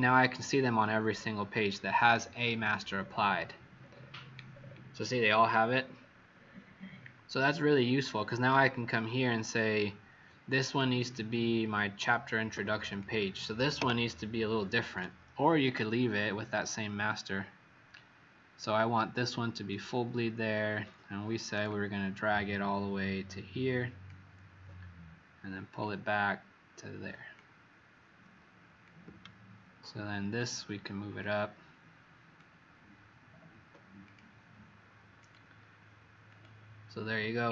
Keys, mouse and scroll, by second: 1.1 alt+scroll down 1, 2.1 alt+scroll down 1, 3.0-3.3 scroll down 1, 5.8 scroll down 18, 8.5 z, 8.8 click, 11.6 Escape, 12.5 v, 12.8 click, 13.7 Delete, 14.8 click, 31.2 shift+click, 33.9 click, 35.2 click.